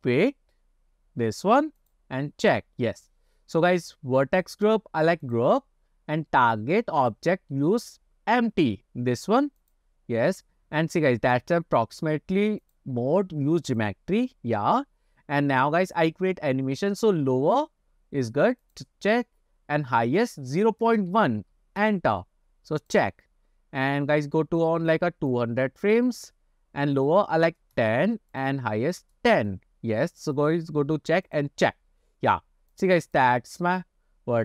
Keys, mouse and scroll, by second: 2.9 scroll up 2, 4.8 click, 7.1-10.0 drag, 12.7-14.2 drag, 18.9-22.2 drag, 23.2 click, 25.7 click, 27.1 click, 28.4-29.6 drag, 30.6 click, 31.5 click, 32.8 click.